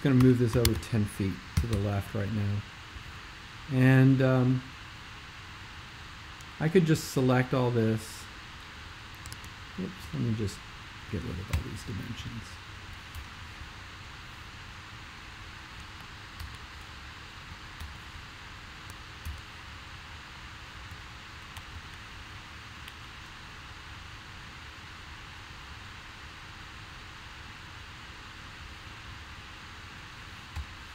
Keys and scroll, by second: 0.3-1.5 typing, 1.7 Return, 11.6 BackSpace, 13.2 BackSpace, 16.5 super+', 17.8 alt+', 19.2 super+/, 30.6 BackSpace.